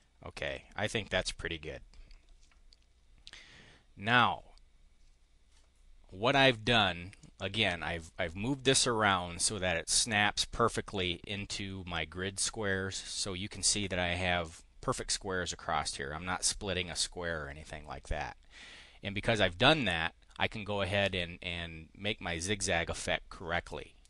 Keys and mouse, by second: 0.3 click, 7.1-9.9 drag, 10.8 click.